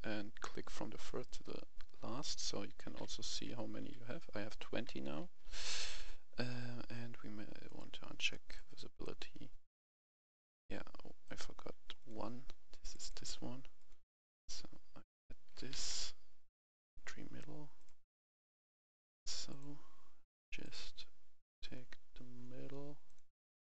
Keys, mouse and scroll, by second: 0.4-1.0 scroll up 1, 1.0-1.4 scroll down 1, 2.3 right click, 2.7 w, 3.3 w, 3.3 s, 3.8 w, 4.8 s, 5.2 d, 5.4 w, 5.8 w, 7.7 click, 8.3 right click, 8.9-9.4 scroll up 1, 9.9-10.7 scroll down 1, 10.7-11.2 scroll up 1, 11.2 click, 15.5 d, 15.7 e, 15.9 s, 16.8 click, 17.2-17.7 scroll down 1, 17.7 click, 21.7-22.3 scroll down 1, 23.0 click.